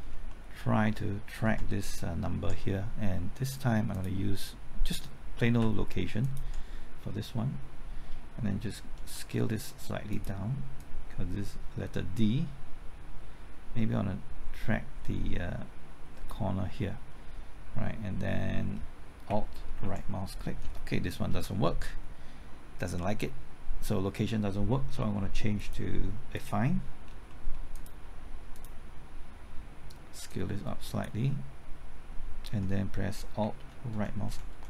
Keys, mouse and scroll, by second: 0.0-0.3 scroll up 1, 0.3 middle click, 3.9 click, 6.2 ctrl+click, 9.0 s, 10.1-17.0 drag, 19.3 typing, 19.8 alt+Right, 21.2 typing, 21.3 ctrl+z, 24.9-25.6 scroll down 1, 25.6 click, 27.0 scroll down 1, 27.3 middle click, 27.7-32.0 drag, 33.4 typing, 33.9 alt+Right, 34.3 alt+Right, 34.5 alt+Right.